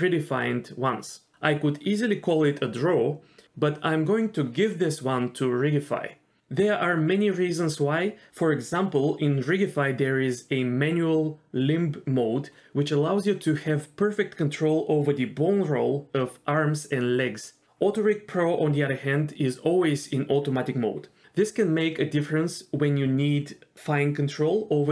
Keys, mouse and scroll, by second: 0.0 shift+click, 5.5 shift+drag, 9.1 scroll up 2, 9.3-12.9 drag, 14.7-17.9 drag, 18.6-23.3 drag, 23.4-23.7 scroll down 2, 23.6 shift+middle click, 23.8-24.1 scroll up 1, 24.1-24.9 drag.